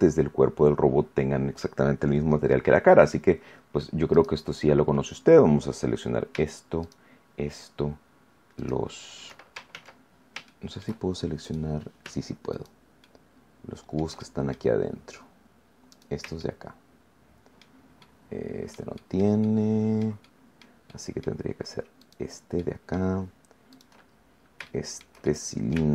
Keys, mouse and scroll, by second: 4.0 right click, 6.8 shift+right click, 8.5 shift+right click, 9.6 ctrl+shift+z, 10.2 ctrl+scroll up 1, 10.4 shift+middle click, 11.4 right click, 12.4 shift+right click, 13.0-14.6 shift+middle drag, 14.7-15.1 shift+scroll up 1, 15.8 right click, 16.3-17.8 shift+middle drag, 18.0 shift+middle click, 19.0 shift+middle click, 19.5-20.8 shift+middle drag, 20.8 shift+middle click, 22.0 shift+right click, 22.5 shift+middle click, 23.6 shift+right click, 24.0-24.5 shift+scroll down 4, 24.6 shift+middle click, 25.2 shift+middle click.